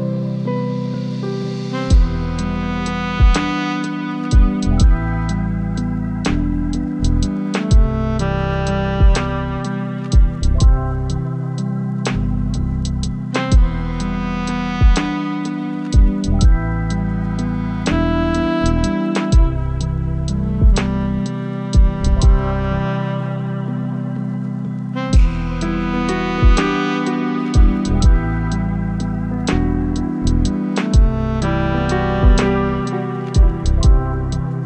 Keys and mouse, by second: 0.5-1.7 drag, 2.6-3.9 drag, 4.9 click, 6.0 ctrl+z, 6.3-7.9 drag, 9.9-11.3 drag, 12.4 click, 13.3 ctrl+z, 13.8 click, 15.3 click, 16.3 ctrl+z, 16.6 click, 18.4 middle click, 19.8 middle click, 21.8 shift+middle click, 24.1 click, 25.5 ctrl+z, 28.8 click, 30.2 click, 31.6 ctrl+z, 31.9 ctrl+z, 32.9 click, 34.2 click.